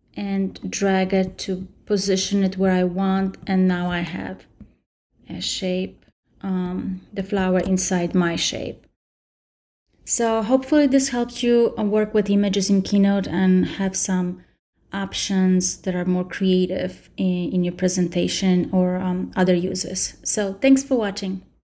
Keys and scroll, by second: 7.4 super+s.